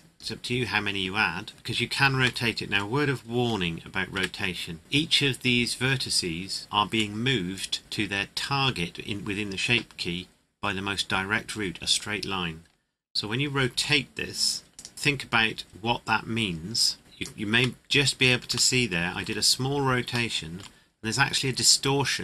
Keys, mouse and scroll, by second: 1.5 scroll up 1, 2.4 shift+middle click, 4.1 Tab, 6.6 middle click, 13.7 r, 14.7 click, 17.0 click, 17.8 middle click, 18.7 shift+middle click, 19.5-20.0 scroll up 1, 20.3 shift+middle click, 21.6 click.